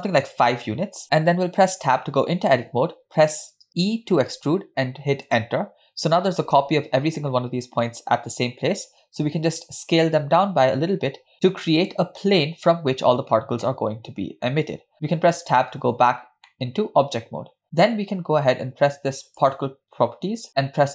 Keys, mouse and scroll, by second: 1.8 Tab, 3.8 e, 9.2 s, 13.6 middle click, 15.2 Tab, 16.5-17.6 middle drag, 19.4 click.